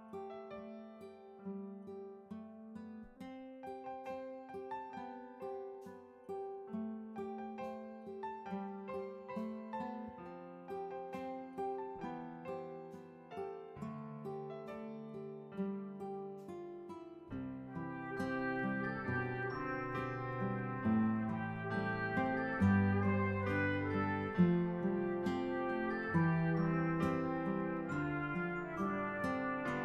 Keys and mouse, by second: 1.1 click, 2.6 click, 5.1 click, 6.6 click, 7.8 click, 7.8 right click, 12.1 click, 15.4 click, 17.0 click, 18.1 click, 19.1 click, 19.6 click, 22.1 click, 24.7 right click, 27.8 click.